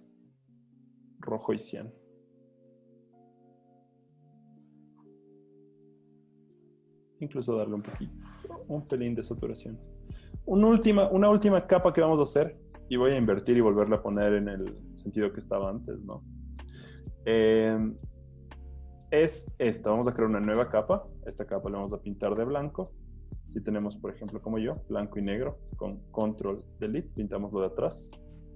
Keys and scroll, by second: 13.2 super+°, 24.0 d, 26.9 super+BackSpace.